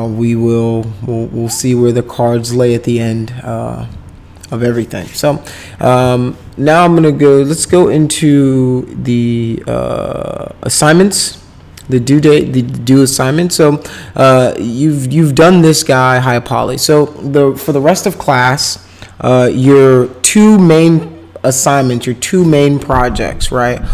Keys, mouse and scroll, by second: 11.1 click.